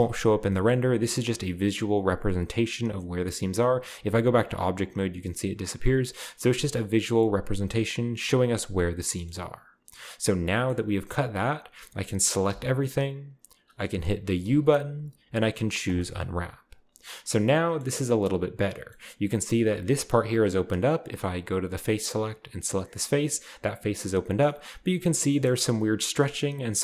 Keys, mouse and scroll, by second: 0.5 shift+middle click, 1.7-3.1 scroll down 2, 4.1 Tab, 6.4-7.1 scroll down 1, 6.7 Tab, 9.1-10.4 middle drag, 10.4-12.4 scroll down 1, 10.5-12.4 middle drag, 12.4 a, 14.4 u, 15.8-16.9 drag, 17.4 middle click, 18.3-19.7 scroll up 3, 21.8 click, 22.5 click, 22.5 middle click, 22.9-23.4 right drag, 24.4-25.4 scroll down 1, 24.7 a, 24.9 a, 25.5 shift+middle click, 25.5-26.2 shift+scroll up 1.